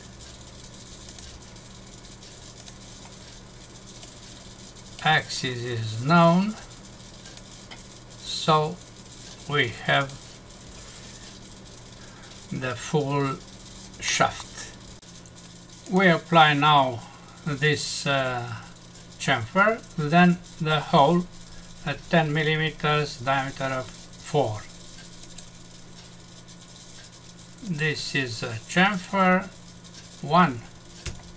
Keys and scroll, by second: 14.1 F6.